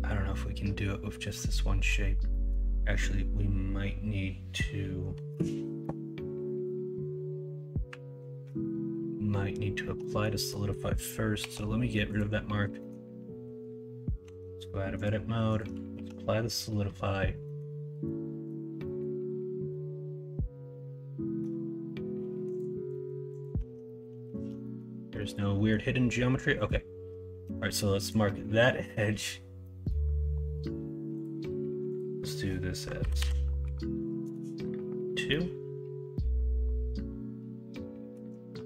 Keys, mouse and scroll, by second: 2.3 middle click, 10.0 middle click, 10.4 middle click, 11.4 q, 12.8 middle click, 14.2 Tab, 15.9 ctrl+a, 16.7 middle drag, 17.4 middle click, 18.0 middle click, 18.8 middle click, 19.7-21.4 middle drag, 22.9 middle click, 23.5 Tab, 23.8 middle click, 24.3 alt+z, 24.6 middle click, 25.2 middle click, 25.5 middle click, 26.6 click, 27.4 q, 28.7 middle click, 29.6 middle click, 33.1-35.3 drag, 33.1 Delete, 35.3-38.1 middle drag.